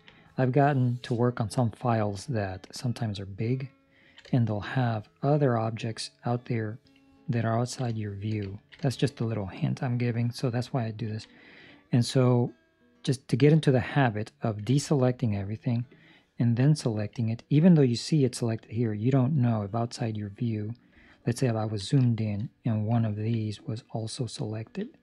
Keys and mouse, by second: 3.0 ctrl+middle click, 4.2 shift+middle click, 7.2 ctrl+middle click, 7.8 shift+middle click, 8.5 ctrl+middle click, 8.8 shift+middle click, 10.9 ctrl+middle click, 15.8 click, 17.3 ctrl+middle click, 20.9 ctrl+middle click, 22.0 shift+middle click, 22.9 ctrl+middle click, 23.7 right click, 24.4 ctrl+middle click.